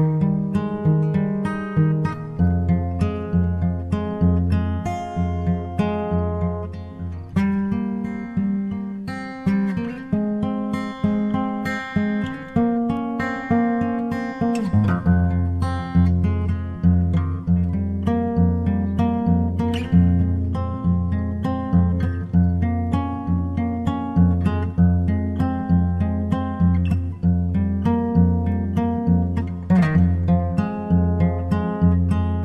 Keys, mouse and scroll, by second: 1.1-2.9 drag, 1.4 s, 3.2-6.6 drag, 3.6 g, 5.9 shift+d, 12.1-14.0 drag, 13.8 g, 15.5-17.5 drag, 16.9 shift+d, 20.7-23.9 drag, 21.2 s, 22.9 g, 25.8-27.6 drag, 27.2-31.2 right drag, 30.9 shift+d.